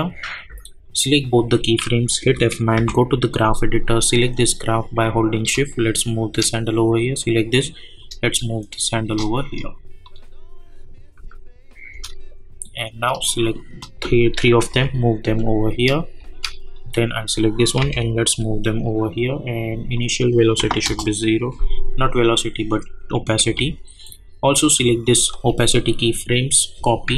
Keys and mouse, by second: 2.2 F9, 3.1 =, 3.3 click, 3.8-6.7 drag, 6.2 shift+click, 7.1 click, 8.3-10.0 shift+drag, 11.1 space, 13.5 shift+click, 14.7 [, 15.3 click, 15.7 space, 16.7 click, 17.8 [, 20.8 Return, 23.4 j, 24.6 click.